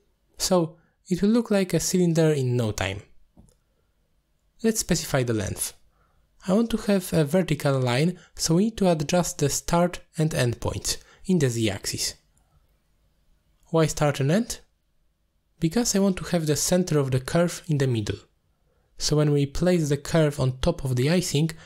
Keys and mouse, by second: 6.3 middle click, 8.0 click, 8.3 click, 10.4-11.5 drag, 12.2 middle drag, 12.6-13.0 shift+middle drag, 13.1 middle click, 14.0 middle click, 15.6-17.6 drag, 18.4-19.7 drag.